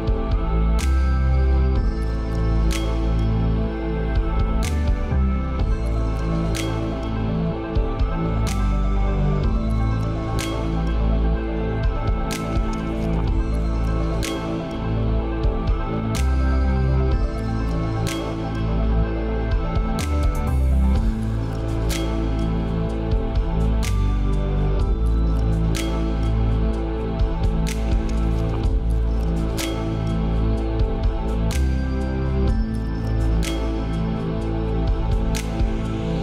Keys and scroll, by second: 0.4 ctrl+space, 2.7 ctrl+;, 5.7 ctrl+space.